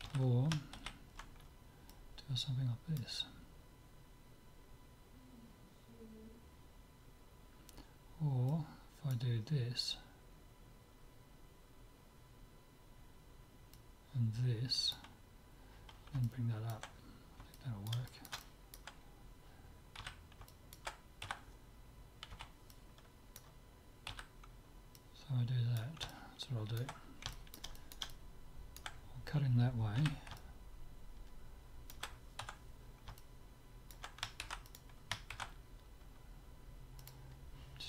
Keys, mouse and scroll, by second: 0.1 ctrl+z, 0.9 ctrl+z, 1.9-3.7 drag, 8.5-10.3 drag, 13.8-15.6 drag, 16.3 middle click, 19.1 middle click, 20.1 z, 20.3-21.3 middle drag, 21.3 a, 21.5-22.5 middle drag, 22.5 b, 24.1 z, 25.2-26.8 drag, 26.1-30.1 middle drag, 30.1 z, 30.4-32.1 middle drag, 32.6 Tab, 32.9-35.0 middle drag, 34.5 ctrl+s, 35.4 ctrl+a.